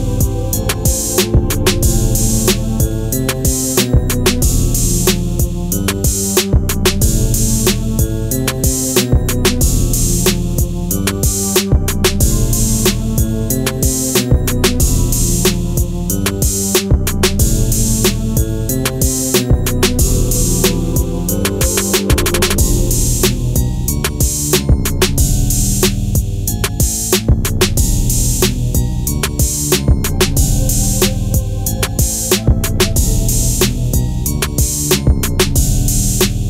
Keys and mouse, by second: 2.0 click, 2.6 g, 3.3 click, 3.7 r, 4.3 click, 4.5 g, 10.4 click, 11.3 ctrl+z, 11.6 ctrl+z, 12.0 ctrl+z, 12.4 ctrl+z, 13.3 s, 13.4 z, 15.0 click, 15.8 r, 16.7 click, 17.4 g, 18.0 click, 18.6 r, 19.9 click, 23.6 g, 24.7 click, 29.2-30.4 middle drag, 30.8 KP_1, 31.7 KP_3, 32.8-33.4 middle drag, 34.2 KP_3.